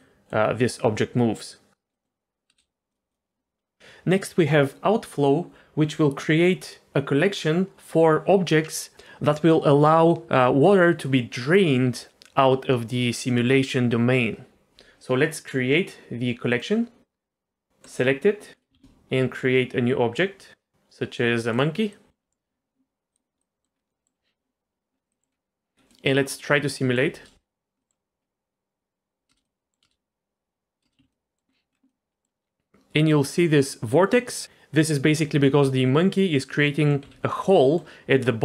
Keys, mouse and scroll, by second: 0.1 middle click, 1.9 middle click, 2.5 space, 2.9 click, 3.1-3.8 drag, 16.5 click, 17.8 click, 18.5 middle click, 18.7 shift+a, 21.9 middle click, 23.1 click, 23.4 middle click, 23.7 scroll up 1, 23.9 middle click, 25.1 middle click, 25.3 scroll down 1, 25.9 middle click, 26.7 middle click, 27.1 space, 27.8 middle click, 28.2 scroll up 1, 29.3 space, 29.4 middle click, 29.8 space, 30.8 space, 31.0 z, 31.1 middle drag, 31.5 scroll up 2, 31.7 scroll down 1, 31.9-32.3 middle drag, 36.2-36.9 middle drag, 37.0 z, 37.3 middle click.